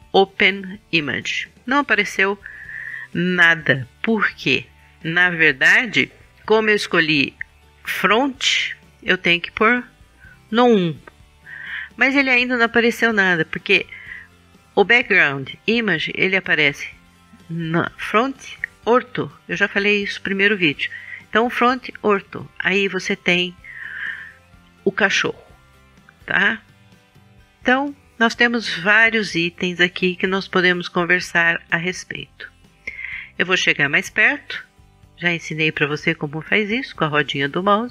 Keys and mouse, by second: 0.0 click, 0.3 middle click, 10.5 KP_1, 21.7 KP_5, 34.3-35.7 drag.